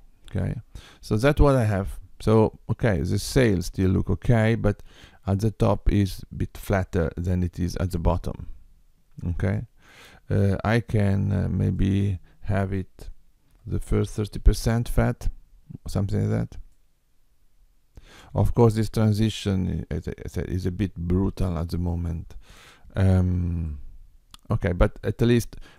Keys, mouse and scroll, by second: 1.2 middle click, 11.8 click, 16.7 middle click, 23.8 middle click.